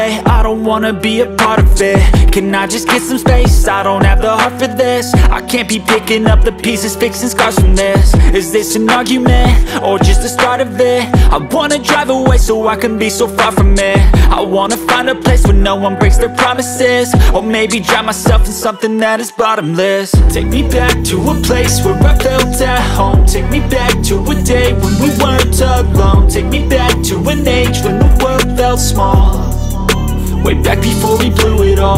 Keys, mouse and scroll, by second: 3.1 space, 3.3 click, 3.4 space, 3.6 click, 9.5-10.0 scroll down 1, 29.5 right click.